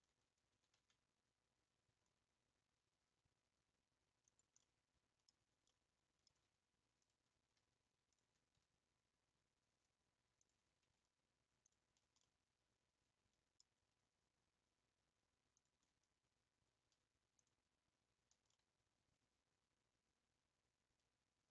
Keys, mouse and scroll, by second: 0.0 alt+click, 0.6 s, 4.6 middle click, 5.3 scroll down 3, 5.7 middle click, 6.3-7.0 scroll up 1, 7.1 click, 8.2 alt+click, 12.2-15.6 middle drag, 18.5-21.5 middle drag.